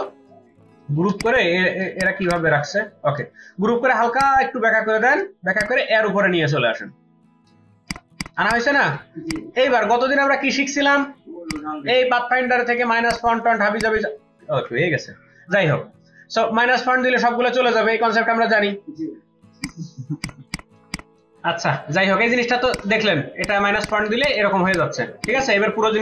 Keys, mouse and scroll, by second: 1.1 space, 1.9 ctrl+alt+click, 7.7 space, 7.9 ctrl+click, 8.1 ctrl+double click, 19.6 ctrl+alt+click, 23.9 double click, 24.0 ctrl+space, 24.2 ctrl+alt+click, 25.9 ctrl+alt+click.